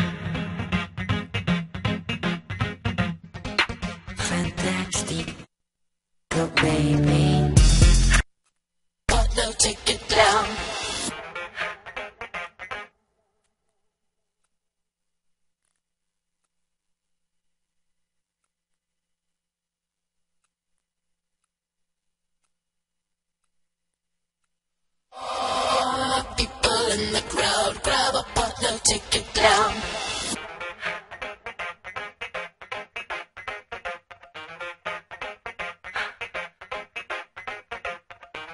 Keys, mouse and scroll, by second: 3.2-5.1 right drag.